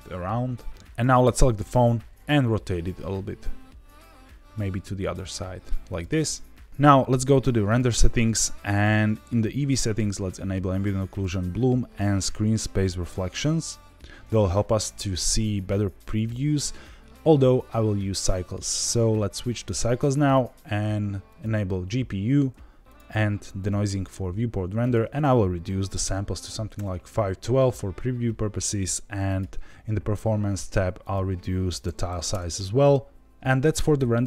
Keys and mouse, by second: 1.5 r, 1.7 z, 5.9 click, 7.6 click, 9.9 click, 11.0 click, 12.1 click, 18.8-19.6 drag, 20.3-21.4 drag, 22.8 click, 23.4 click, 24.7-27.4 drag, 29.2 click, 31.0-32.7 drag.